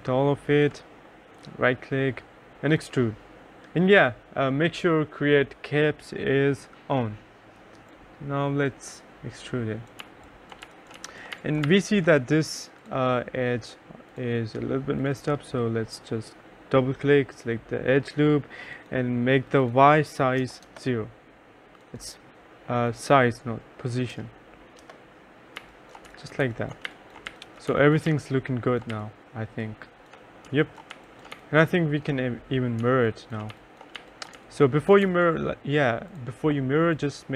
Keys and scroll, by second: 0.0-0.5 typing, 10.1-12.3 typing, 20.5 0, 20.7 Return, 24.2 0, 24.9 Return, 25.4-29.0 typing, 30.3-35.1 typing.